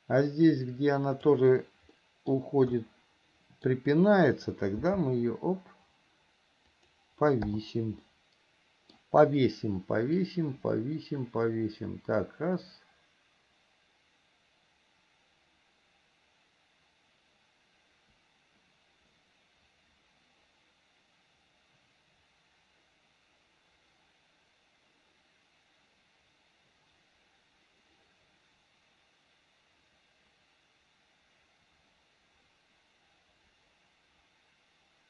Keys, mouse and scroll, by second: 2.2 middle click, 3.0 middle click, 8.2 middle click, 10.5-35.0 drag.